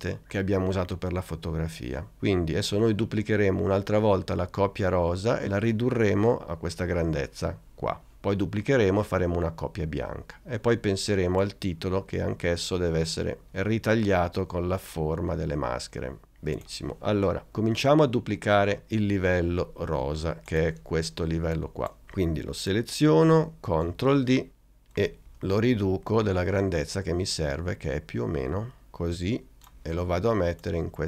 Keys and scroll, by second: 23.7 super+d.